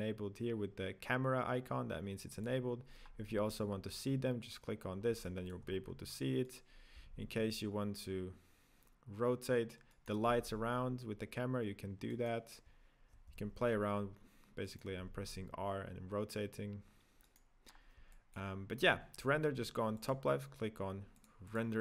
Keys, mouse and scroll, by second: 4.2 click, 4.3-5.2 scroll down 4, 5.2-5.7 middle drag, 5.7-6.4 scroll down 2, 6.4 right click, 6.9 r, 10.3 r, 13.3 r, 15.8 r, 17.6-18.1 scroll down 2, 18.1-18.7 middle drag, 18.7-19.9 scroll down 1, 19.9-21.8 drag.